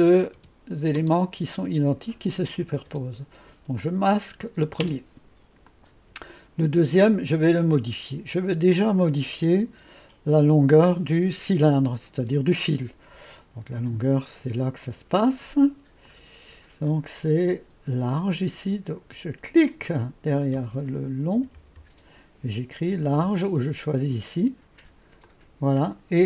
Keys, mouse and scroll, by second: 0.0-1.0 typing, 2.7-3.4 typing, 3.8 click, 4.9 typing, 5.7-10.8 drag, 14.9 click, 16.1 click, 19.7 click, 21.4 BackSpace, 21.6 BackSpace, 21.8 BackSpace, 22.9 typing, 25.3-26.2 drag.